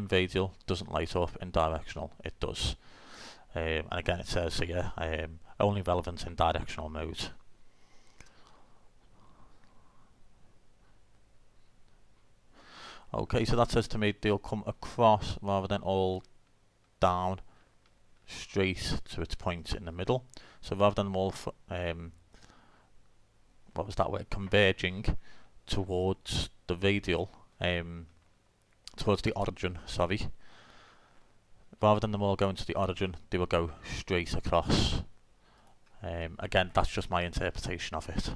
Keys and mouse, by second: 0.9-2.5 drag, 2.7-10.1 middle drag, 12.7 middle click, 19.7-21.6 drag, 35.7-38.3 drag, 37.3 middle click.